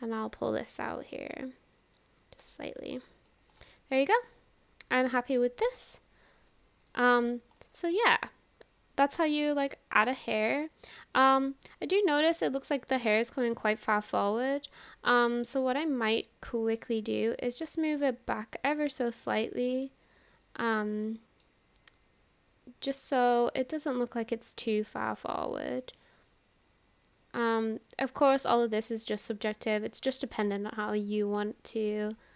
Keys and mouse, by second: 0.4 click, 1.8 click, 2.7 middle click, 3.8-5.3 middle drag, 6.4-7.0 drag, 7.2 click, 8.0 shift+middle drag, 8.4-11.3 middle drag, 12.3 middle click, 14.1 click, 16.7 click, 19.1-20.2 drag, 20.3 click, 20.7-21.5 middle drag, 22.9-23.3 drag, 23.3-29.0 middle drag, 29.9-30.3 shift+middle drag, 30.8 shift+middle click, 31.2 click, 32.0 click.